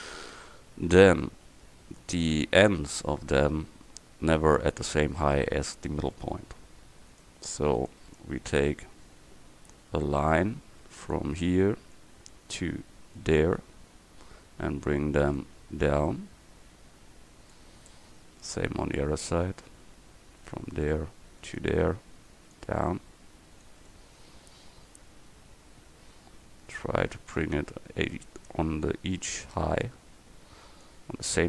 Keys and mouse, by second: 1.0 Tab, 7.2-11.1 drag, 11.1-13.2 middle drag, 13.2-14.6 drag, 22.6-23.7 middle drag, 23.9 middle click.